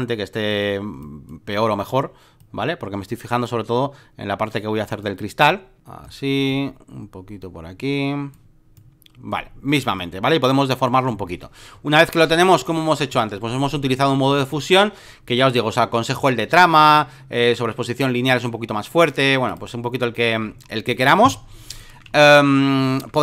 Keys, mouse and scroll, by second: 12.6 /, 13.1 Return, 14.4-16.5 drag, 19.5 click, 20.6 alt+middle click, 21.7 ctrl+click, 22.1 alt+middle click, 22.8 alt+middle click.